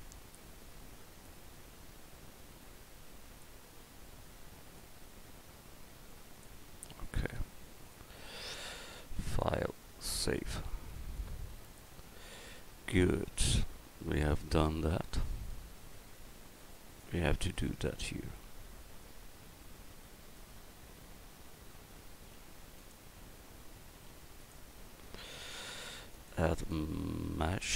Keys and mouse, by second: 0.6 middle click, 4.8 click, 6.8 a, 15.5 middle drag, 15.8 middle click, 16.2 middle click, 18.7 KP_1, 20.4-21.3 right drag, 22.4 g, 24.1 a.